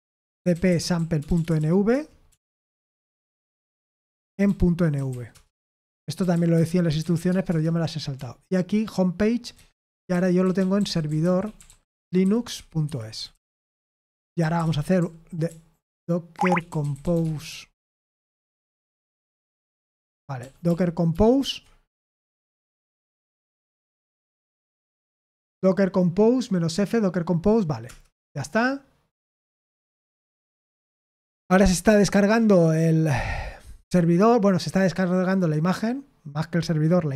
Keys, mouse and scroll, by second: 0.0-17.2 typing, 14.4 Escape, 18.2-19.2 typing, 20.3 ctrl+p, 20.6 ctrl+p, 21.1 ctrl+p, 23.0 ctrl+c, 23.5 ctrl+l, 24.0 ctrl+p, 24.4 ctrl+p, 27.8 Return, 30.5 Return.